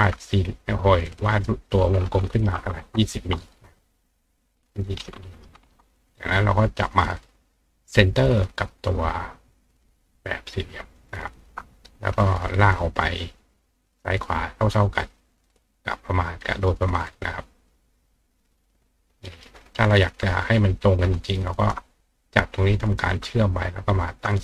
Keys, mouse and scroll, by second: 1.1 click, 4.4 click, 8.0 click, 9.0 click, 9.8-11.0 drag, 12.2-16.6 ctrl+drag, 16.4 ctrl+right click, 17.7-19.4 ctrl+drag, 19.3 ctrl+right click, 21.5 shift+click, 22.9 click, 24.0 shift+click.